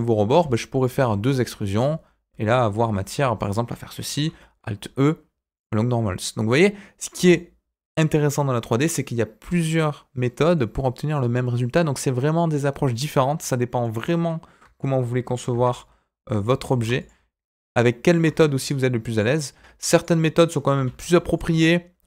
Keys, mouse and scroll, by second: 0.3 e, 0.9 e, 1.7 click, 3.3 alt+click, 4.1 alt+e, 7.1 Tab, 7.3-9.4 middle drag, 9.6-10.2 scroll up 1, 10.2-10.5 scroll up 1, 10.5-13.8 middle drag, 14.6 Tab, 15.5 ctrl+r, 16.7 ctrl+r, 19.1 click, 19.9 alt+click, 20.7 alt+e.